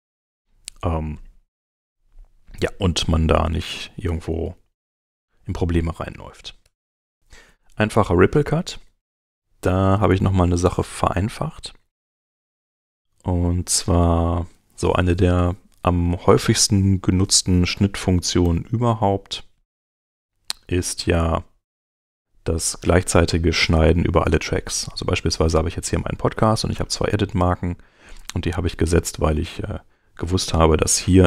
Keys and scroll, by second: 4.8 9, 6.6 BackSpace, 8.6 super+Tab, 18.2 alt+-.